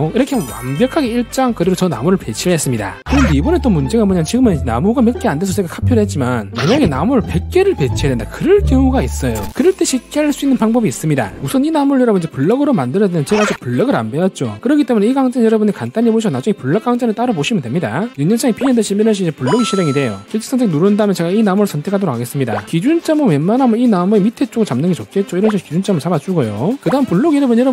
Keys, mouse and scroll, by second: 12.2 scroll down 1, 12.5 scroll up 1, 19.1 right click, 21.0 click, 21.6 click, 21.9 click, 22.4 right click, 23.5 click, 26.1 click.